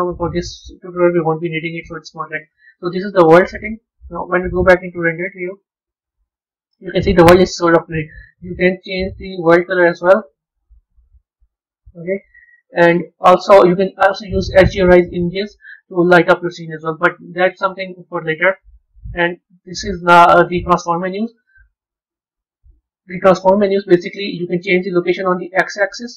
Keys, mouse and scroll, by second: 2.5 click, 4.5 z, 6.4-8.4 middle drag, 8.4 click, 15.3 z, 19.4 click, 21.5 click, 22.6 click, 23.6 click, 25.3-26.1 drag.